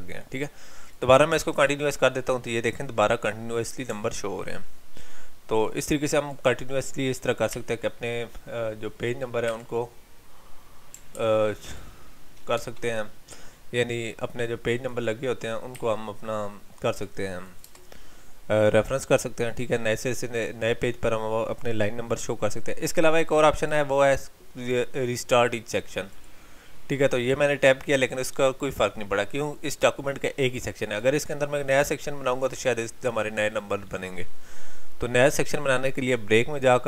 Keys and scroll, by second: 11.2 ctrl+z.